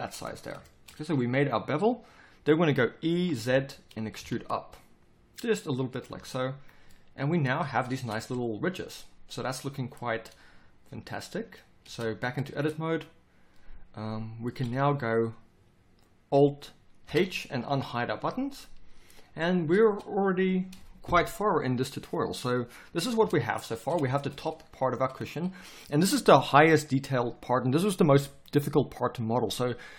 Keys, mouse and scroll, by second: 3.2 e, 6.1 z, 7.9 Tab, 11.8 Tab, 14.6 a, 17.0 alt+h, 17.7 a, 23.2 Tab.